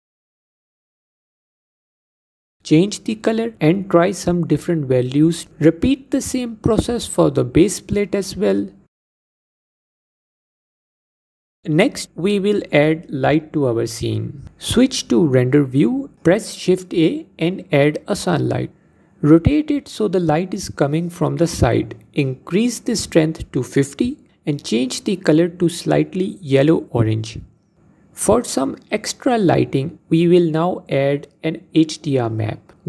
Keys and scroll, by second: 13.9 z, 15.1 shift+a.